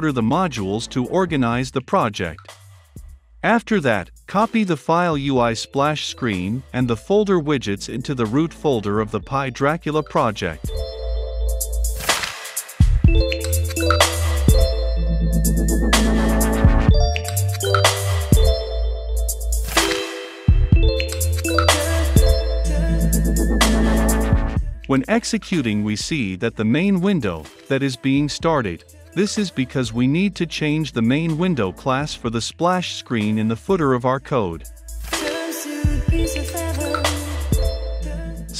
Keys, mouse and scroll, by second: 1.3-2.2 typing, 2.5 click, 3.1 Return, 3.3 v, 5.2-7.9 drag, 7.9-9.2 right drag, 9.2-11.9 drag, 11.9-12.6 right drag, 12.6-14.7 drag, 14.7-17.9 right drag, 17.9-19.8 drag, 19.8-20.9 right drag, 20.9-24.2 drag, 27.1 F5, 27.1 click, 31.7-34.1 drag, 33.9-35.0 typing, 36.0 Return, 37.0 s.